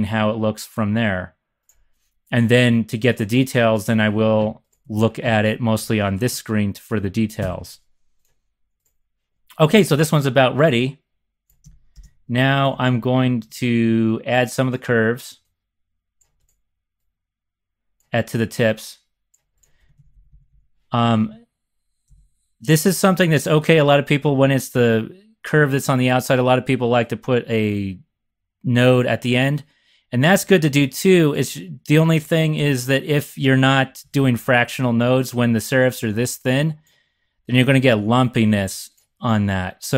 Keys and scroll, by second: 4.7 x, 5.2 x, 6.3-6.9 typing, 11.9 ctrl+shift+c, 12.8 z, 12.8 z, 13.4 z, 13.6 z, 19.8-22.1 typing, 32.6 ctrl+shift+c, 34.1 z, 34.2 z, 34.4 z.